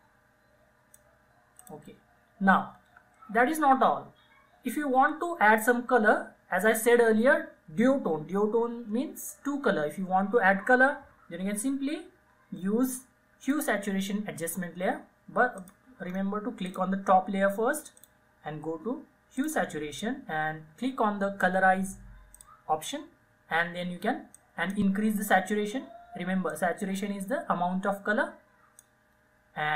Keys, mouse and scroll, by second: 13.6 click, 16.3-16.9 scroll up 1, 16.9 click, 22.6-29.7 drag.